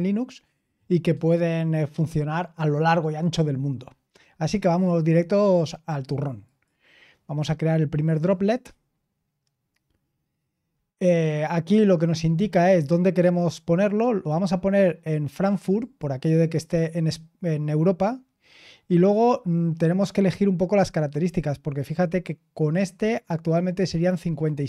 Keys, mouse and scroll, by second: 6.4 click, 8.2 click, 18.1-20.1 scroll down 4, 20.1-20.7 scroll up 1, 20.7-22.4 scroll down 2, 22.4-24.6 scroll down 1.